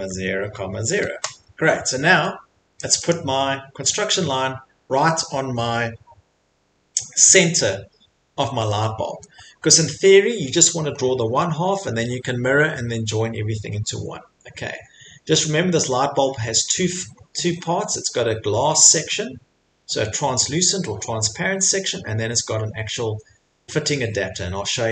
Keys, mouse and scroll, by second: 0.0-1.3 typing, 2.1 Escape, 2.9 click, 3.1 click, 8.2 middle click, 8.6 middle click, 8.9 middle click, 9.0 middle click, 9.1 Escape, 9.1 middle click, 9.7 middle click, 9.8 middle click, 10.3 middle click, 10.3 middle click, 11.0 middle click, 13.6 middle click, 14.2 middle click, 14.2 middle click, 14.5 middle click, 14.9 middle click, 15.0 middle click, 16.7 middle click, 16.7 middle click, 17.1 middle click, 17.2 middle click, 17.6 middle click, 17.7 middle click, 18.2 middle click, 22.0 middle click, 22.0 middle click, 22.5 middle click, 23.9 middle click.